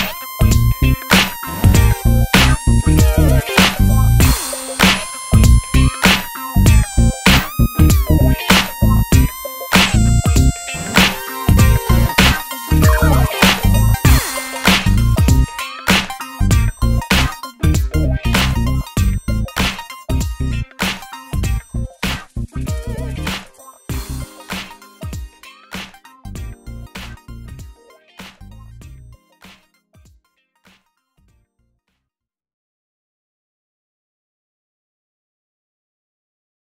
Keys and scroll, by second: 11.0 d.